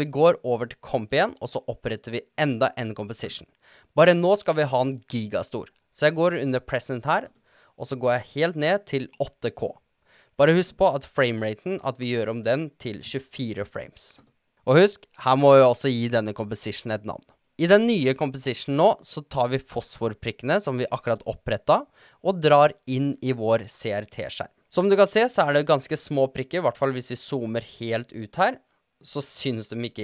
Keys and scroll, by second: 11.5-12.5 typing, 16.5-17.3 typing.